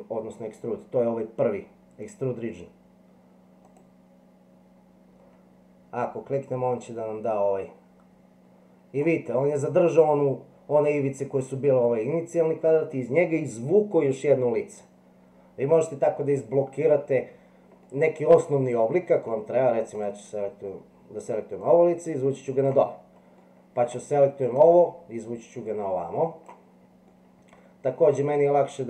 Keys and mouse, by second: 3.7 click, 7.3-9.1 drag, 17.9-19.3 middle drag, 20.0 click, 21.8 click, 23.5 middle click, 25.7 click, 27.1-28.1 middle drag.